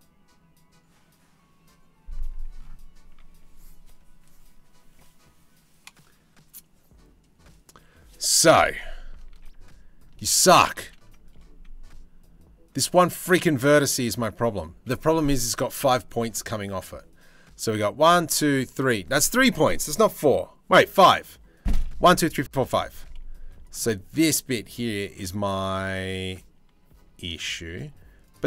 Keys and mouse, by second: 9.1 ctrl+z, 10.1 ctrl+z, 10.4 ctrl+z, 13.7 click, 23.0 2, 26.5 1, 27.0 click.